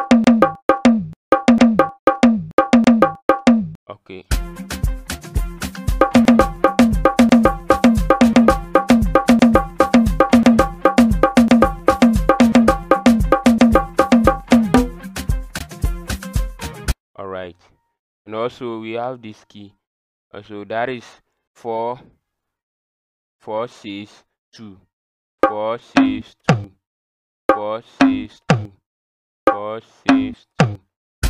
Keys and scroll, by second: 1.3 KP_4, 2.7 KP_Divide, 3.3 KP_4, 6.1 KP_Divide, 7.1 KP_4, 7.3 KP_Divide, 7.7 KP_4, 8.1 KP_4, 8.3 KP_Divide, 8.5 KP_4, 8.9 KP_Divide, 10.2 KP_4, 10.8 KP_4, 11.2 KP_4, 11.6 KP_4, 12.0 KP_Divide, 13.0 KP_Divide, 13.4 KP_Divide, 14.0 KP_4, 25.4 KP_4, 26.0 KP_6, 26.4 KP_2, 27.5-30.6 typing.